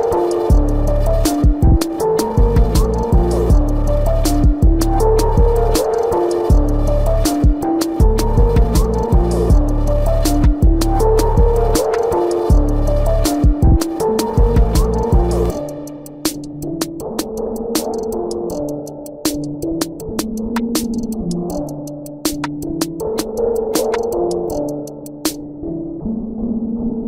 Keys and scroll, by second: 3.5 ctrl+alt+z, 7.0 ctrl+alt+z, 8.1 ctrl+alt+z, 8.9 ctrl+alt+z, 10.7 space, 12.2 ctrl+alt+z, 12.9 ctrl+alt+z, 13.9 ctrl+=, 14.8 space, 16.9 ctrl+=, 18.2 space, 19.0 ctrl+=, 20.4 space, 23.9 ctrl+alt+z, 25.2 ctrl+=, 26.5 ctrl+=.